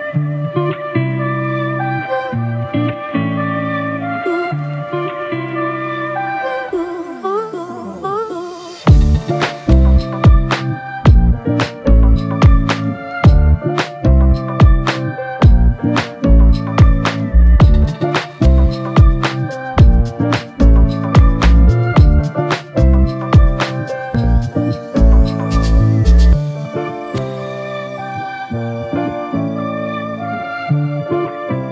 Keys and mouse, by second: 3.3 alt+click, 7.2 alt+click, 8.2 double click, 10.2 shift+click, 14.0 ctrl+alt+click, 19.1 alt+click, 29.9 alt+click.